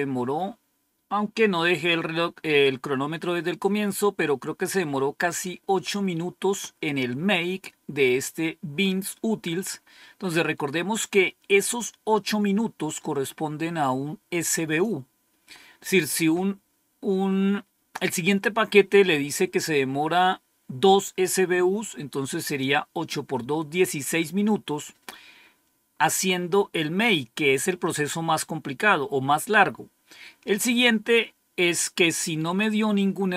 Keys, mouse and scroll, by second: 9.7-13.2 scroll up 3, 13.2-14.8 drag, 23.7-24.0 scroll down 2, 24.3-25.0 scroll down 2, 25.8 scroll down 2.